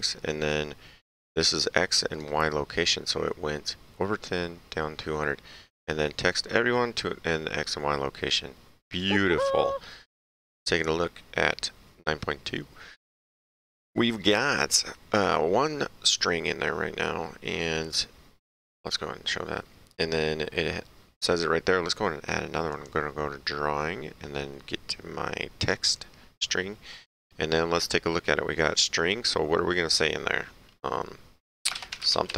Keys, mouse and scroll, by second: 1.4 click, 8.9 click, 10.2 ctrl+Page_Down, 17.9 click, 22.7 click, 26.0 click, 31.5-32.3 typing.